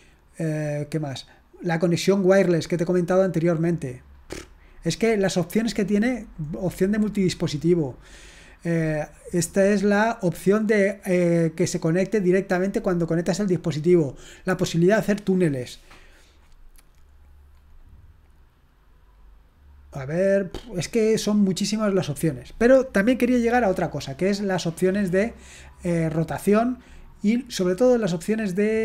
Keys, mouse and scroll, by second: 2.4 scroll down 2, 5.3-6.1 scroll down 1, 7.4-8.8 scroll down 3, 8.8-9.8 scroll up 2, 13.4-14.0 scroll down 1, 15.5-17.7 scroll down 1, 17.7-19.1 scroll up 1, 19.1-20.5 scroll down 1, 21.0 scroll down 1, 22.1 scroll down 1, 26.3-28.2 scroll down 1.